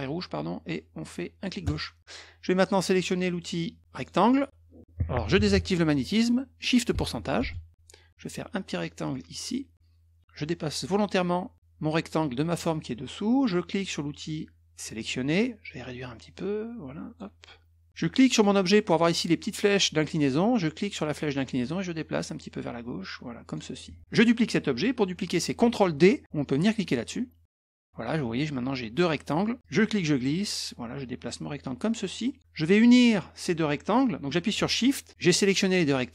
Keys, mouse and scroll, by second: 1.6 click, 3.9 click, 7.4 shift+ù, 9.1-10.9 drag, 15.0 click, 16.3 click, 18.3 click, 21.3-23.5 drag, 27.7 click, 29.6-32.4 drag.